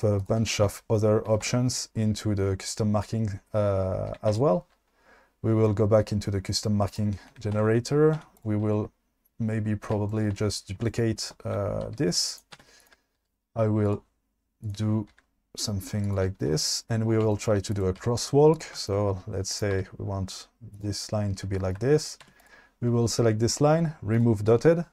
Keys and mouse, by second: 0.2 click, 3.6 Tab, 6.5 Tab, 6.9 click, 7.6 Tab, 8.2 2, 11.9 shift+d, 12.6 1, 12.9 click, 13.1 g, 14.6 click, 15.2 g, 17.7 click, 18.0 g, 18.5 click, 19.6 click, 19.8 g, 20.7 click, 22.3 2, 24.2 click.